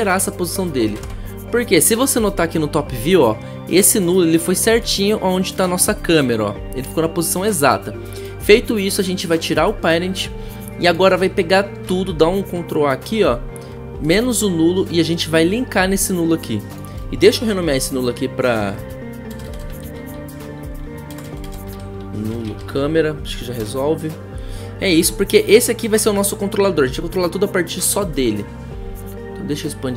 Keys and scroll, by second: 0.9-1.8 typing, 1.0 Return, 11.8 ctrl+a, 17.5 Return, 18.3-23.4 typing, 23.8 Return.